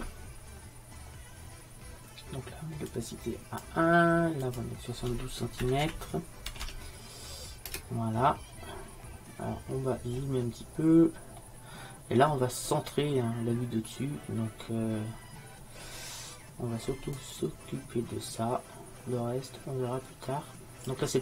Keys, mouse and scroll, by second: 0.0 click, 3.0-7.7 middle drag, 9.8-16.6 middle drag, 17.2-19.1 drag.